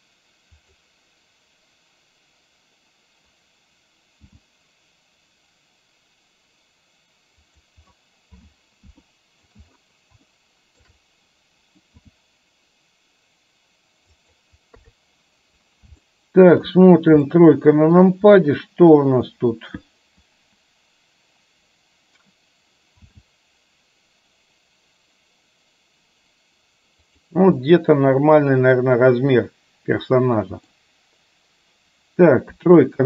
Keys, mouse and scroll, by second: 4.4 s, 9.1 shift+middle click, 9.1 shift+scroll up 1, 9.4 shift+scroll down 1, 10.3-10.8 shift+middle drag, 10.3 shift+scroll up 1, 12.1 s, 14.9 KP_3, 16.1-16.6 shift+middle drag, 17.3-18.1 shift+middle drag, 23.2 s, 27.7-30.8 middle drag, 32.6 KP_3.